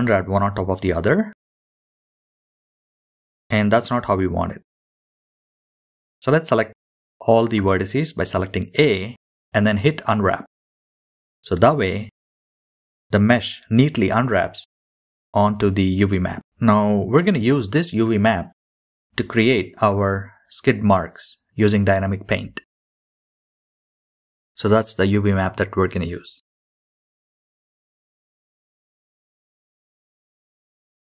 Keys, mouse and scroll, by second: 0.8-3.1 drag, 7.3-11.0 drag, 11.0 scroll up 4, 16.8-17.1 scroll down 1, 29.2 click.